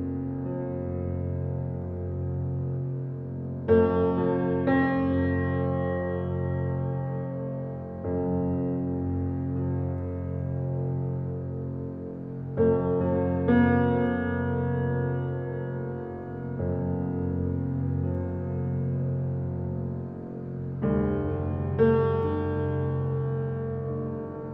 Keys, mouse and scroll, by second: 4.4 alt+right click, 5.2 shift+click, 6.7-8.6 alt+right drag, 8.6 click, 10.9 alt+click, 12.8 right click, 13.9 click, 15.5 ctrl+s, 16.3 scroll down 1, 16.7 alt+click, 17.3 alt+right click, 17.6-19.6 alt+drag, 19.6 ctrl+1, 20.6 click, 21.2 scroll up 1, 21.7 alt+middle click, 22.0 alt+right click, 22.5 click.